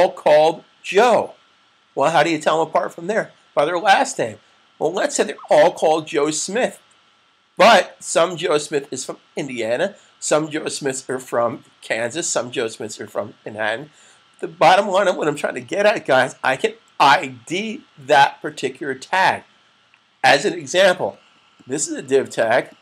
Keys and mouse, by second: 22.3 click.